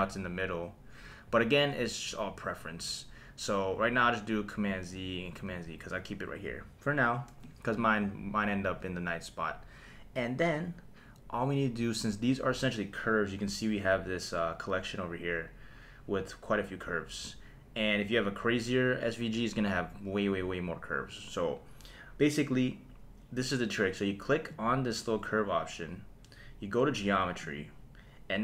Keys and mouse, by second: 0.0 g, 1.3 Escape, 4.7 super+z, 5.3 super+z, 24.5 click, 27.4 click.